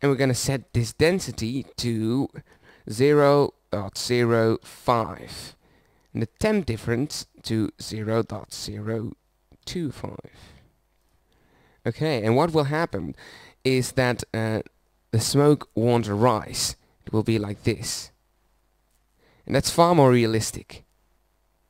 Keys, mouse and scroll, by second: 13.4-14.5 middle drag, 17.4-20.2 drag.